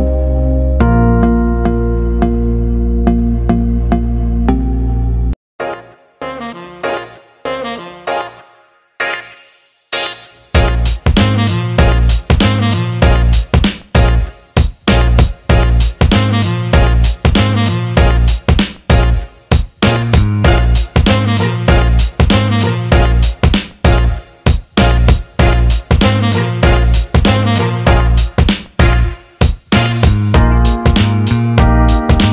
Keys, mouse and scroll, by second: 0.1-1.2 drag, 2.6-5.3 drag, 5.6 alt+middle click, 6.4 click, 7.7 alt+middle click, 8.4 click, 8.9 alt+middle click, 9.6 alt+middle click, 10.7 alt+middle click, 11.6-15.1 drag, 15.3 alt+middle click, 17.0 alt+middle click, 17.1 alt+shift+middle click, 18.9 click, 19.7 alt+shift+middle click, 20.1 alt+middle click, 21.3 click, 22.2-24.1 drag, 24.3-26.9 alt+middle drag, 27.3 alt+middle click, 28.2-28.7 drag, 29.6-31.7 drag, 32.0 alt+middle click.